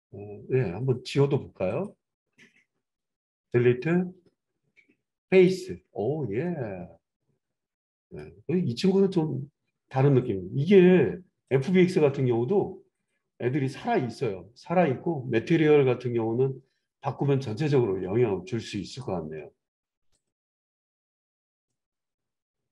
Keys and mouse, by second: 3.4 Delete, 18.8 click, 19.0-20.1 middle drag, 20.1 click, 20.4-22.7 middle drag.